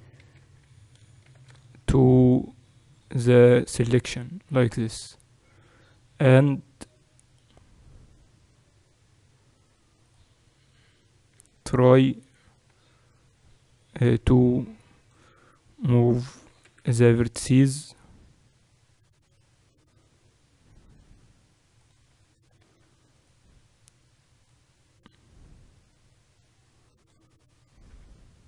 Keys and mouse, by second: 0.2 alt+s, 1.2 shift+s, 10.1-12.7 right drag, 11.4 Tab, 12.7 a, 14.0 b, 15.8-17.2 middle drag, 16.5 g, 22.7 Tab, 23.2-25.9 right drag, 24.5-27.8 drag, 27.8 Tab.